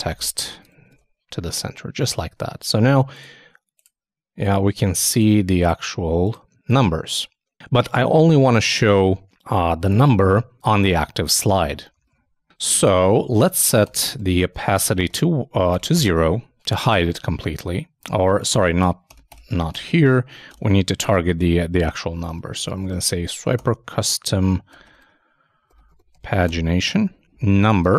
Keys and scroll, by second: 0.6 super+Return, 0.7 super+s, 0.9 super+Tab, 12.0 super+Tab, 18.3 shift+super+Left, 19.1 shift+BackSpace.